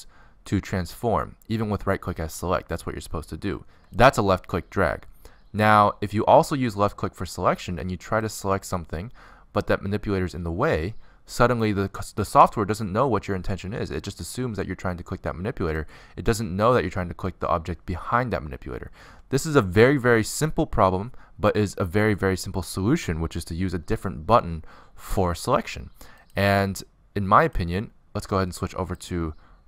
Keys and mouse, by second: 0.3-0.7 drag, 0.8-2.0 drag, 2.9 click, 4.4 ctrl+z, 4.7 ctrl+z, 7.2-8.9 middle drag, 11.0 middle click, 13.0 middle click, 13.6-14.3 drag, 14.3-14.9 middle drag, 14.9-17.0 drag, 17.2-19.0 drag, 19.1-21.0 drag, 21.0-25.0 middle drag, 25.0 click, 25.2 middle click, 25.9-27.0 middle drag, 27.1-28.9 middle drag, 28.9-29.6 drag.